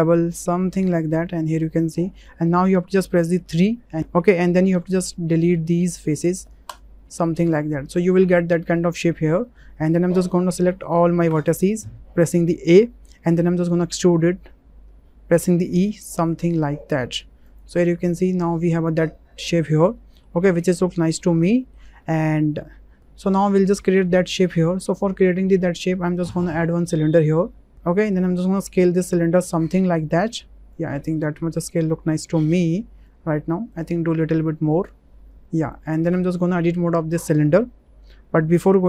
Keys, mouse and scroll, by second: 0.8 click, 1.7-2.1 shift+middle drag, 2.5 shift+click, 3.4 3, 5.8 Delete, 7.5-8.7 drag, 9.4 shift+click, 12.2 a, 14.0 3, 15.5 e, 17.5 click, 17.9 click, 18.3 Tab, 19.8-21.2 drag, 21.5 shift+middle click, 22.0 middle click, 26.2 shift+a, 28.2 click, 29.3-30.7 drag, 31.1 drag, 31.2 w, 31.7-33.0 drag, 34.7 click, 36.1 Tab, 36.5 click.